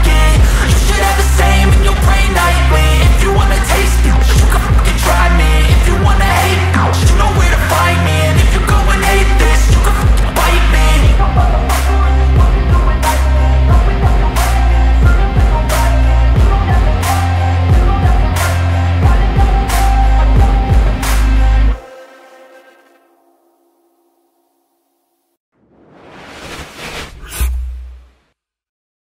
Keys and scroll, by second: 15.1 ctrl+alt+space.